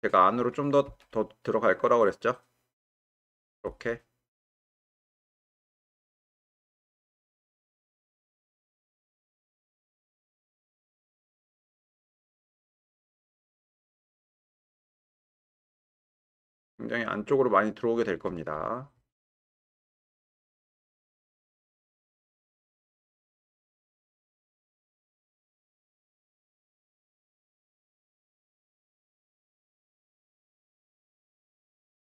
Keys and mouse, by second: 0.5 click, 0.9 g, 4.6 click, 5.1 g, 10.0 click, 10.6 g, 13.8-14.7 drag, 15.1 g, 18.7 click, 19.4 g, 23.8 g, 27.1-27.6 shift+middle drag, 29.6 click, 30.3 g, 30.6 y.